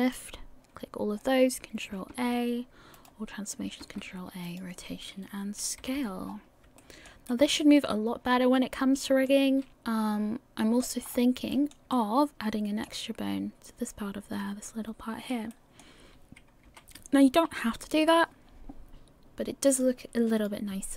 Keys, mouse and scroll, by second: 0.0 shift+click, 2.1 ctrl+a, 3.8 ctrl+a, 5.8 a, 6.3-6.6 scroll up 4, 6.8 shift+middle click, 7.3 middle click, 11.0-11.5 scroll up 3, 11.5 shift+middle click, 11.6 shift+middle click, 11.9 middle click, 12.5 middle click, 16.7 KP_1, 19.7 click.